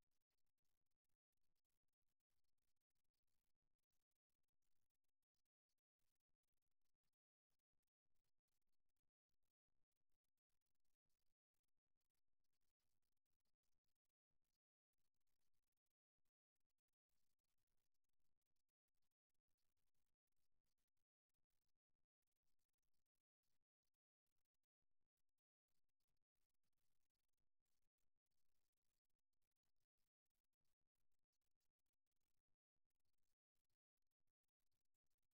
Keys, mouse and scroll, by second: 0.1 middle click, 2.9-4.4 middle drag, 4.6-6.5 drag, 7.2-11.6 middle drag, 12.6 right click, 13.2 middle click, 13.4-14.4 right drag, 14.4-16.2 drag, 16.6-18.6 middle drag, 19.5-20.8 middle drag, 20.8 click, 21.6 middle click, 21.8 middle click, 22.6 right click, 24.6 middle click, 25.7 middle click, 26.1 click, 26.6-28.6 middle drag, 31.0-32.7 middle drag, 34.2 middle click, 35.2-35.3 drag.